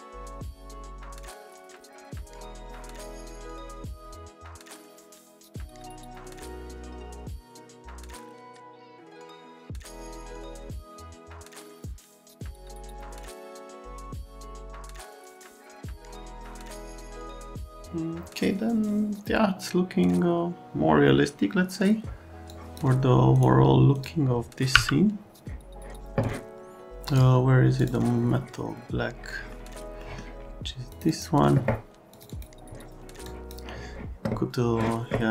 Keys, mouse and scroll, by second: 3.8 middle click, 4.9 middle click, 6.3 middle click, 6.7 scroll, 6.9 alt+right click, 7.2 middle click, 7.3 middle click, 7.5 alt+right click, 7.6 right click, 7.8 middle click, 8.0 middle click, 8.8 F3, 9.7 click, 10.2 F3, 11.0 click, 13.7 click, 15.5 click, 15.8 click, 16.2 click, 22.5 click, 23.3 click, 23.9 click, 24.7 m, 27.1 click, 27.7 click, 29.3 middle click, 30.0 middle click, 30.9 click, 31.0 click, 32.1 click, 32.3 click, 33.3 click.